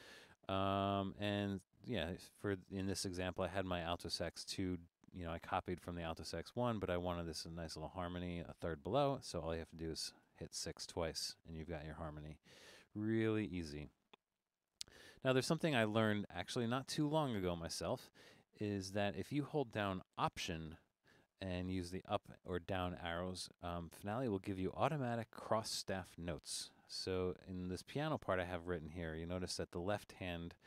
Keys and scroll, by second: 10.1 typing.